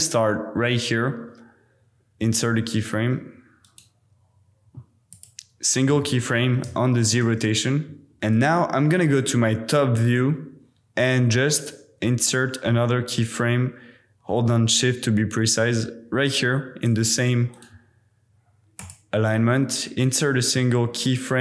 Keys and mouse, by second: 3.6-5.2 drag, 6.0 click, 7.2 space, 8.3 KP_7, 11.7 click, 12.7-14.4 shift+middle drag, 14.4-17.0 shift+drag, 17.0 shift+middle click, 17.5-18.9 drag, 18.9-19.3 middle drag, 19.3 click, 19.4 middle drag, 20.5-21.4 middle drag.